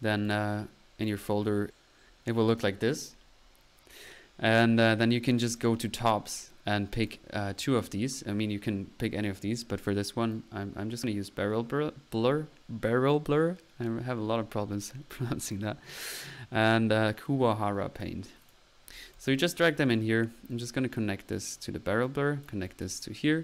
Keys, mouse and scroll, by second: 0.0 BackSpace, 0.0 c, 5.5 typing, 7.2 typing, 18.6-18.9 drag, 18.9 middle click, 19.1-20.3 drag.